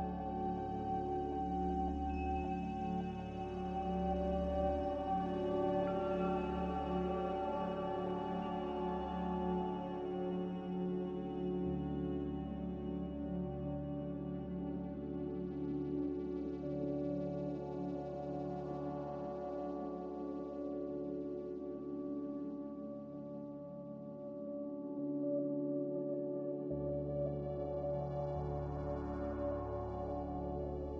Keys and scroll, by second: 3.2 ctrl+z, 3.5 ctrl+z, 3.7 ctrl+z, 6.7 a, 13.9 ctrl+z, 14.3 ctrl+z, 14.5 ctrl+z, 24.8 ctrl+z, 29.5 x.